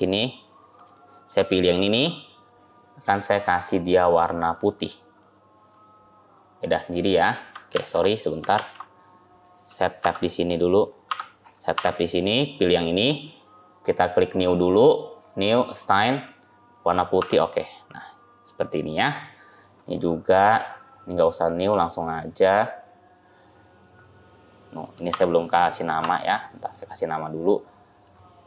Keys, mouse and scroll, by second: 0.2-0.7 scroll up 3, 0.8 shift+middle click, 1.9 click, 3.4 click, 7.6 ctrl+z, 8.4 ctrl+z, 9.3 click, 9.9 Tab, 10.3 click, 10.9 Tab, 11.3 click, 11.6 Tab, 12.5 click, 14.2 click, 15.6 click, 17.1 Tab, 17.4-17.9 scroll down 2, 17.9 click, 18.4 scroll down 2, 19.1 click, 20.2 click, 21.8 click, 25.0 Tab, 25.3 click, 26.0 Tab, 26.2 click, 27.8 click, 27.9 click.